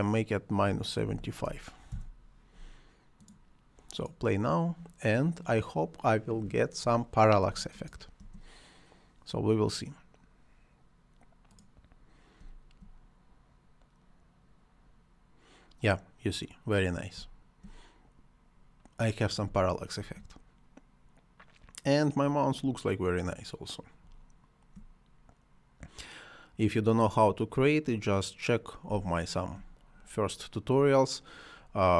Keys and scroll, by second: 0.4-1.6 typing, 1.9 Return, 8.2 space, 12.4 space, 19.4 space.